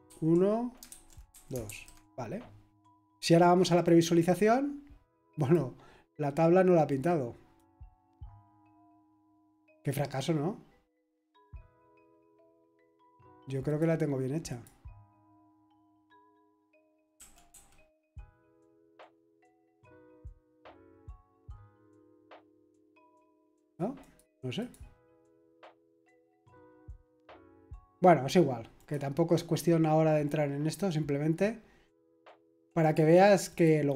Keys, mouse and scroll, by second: 0.0-1.6 typing, 3.7 click, 5.4 click, 6.9 click, 11.0 click, 12.5 click, 13.2 click, 13.8 click, 14.5 click, 15.2 click, 16.1 click, 16.9-18.0 typing, 18.9 click, 19.4 middle click, 20.5 click, 21.0-23.2 middle drag, 23.6 click, 24.6 click, 25.1 click, 26.8 click, 27.4 click, 28.7 click, 32.8 click.